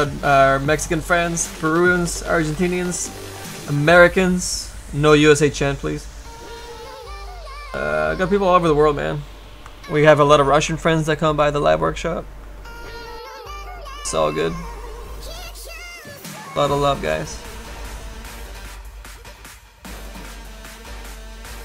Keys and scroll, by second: 15.4 s, 15.7 s, 20.6 s.